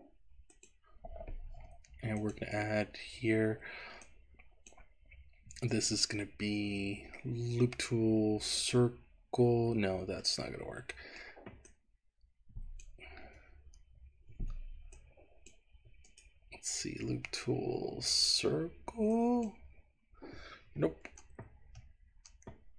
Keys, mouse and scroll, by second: 1.5 Escape, 2.1 click, 3.3-4.1 scroll up 1, 4.1 click, 4.1-4.8 scroll up 1, 5.8-8.7 right drag, 10.4-11.4 middle drag, 11.8-12.9 drag, 14.9 shift+click, 16.1-19.6 right drag, 21.1 ctrl+x, 21.6 ctrl+z.